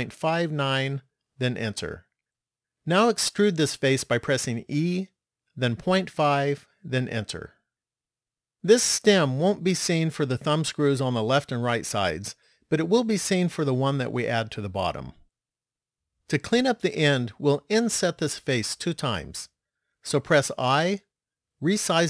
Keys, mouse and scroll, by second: 4.5 e, 21.1 i.